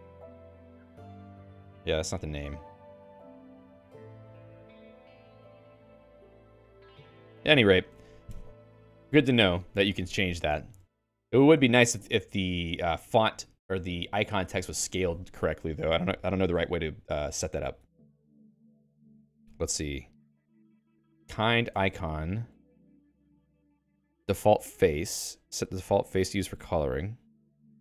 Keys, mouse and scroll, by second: 7.9 ctrl+g, 10.4 -, 11.6 BackSpace, 15.0 Escape, 21.1-22.5 typing, 24.0 ctrl+j, 24.2 ctrl+j, 24.4 ctrl+j, 24.6 ctrl+j, 24.8 ctrl+j.